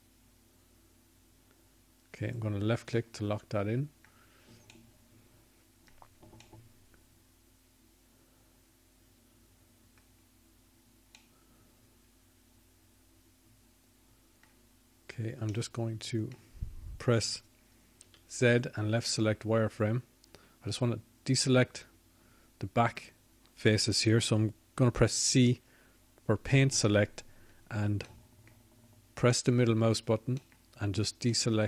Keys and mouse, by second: 9.7-10.8 middle drag, 13.7 middle click, 23.9 z, 30.5 c.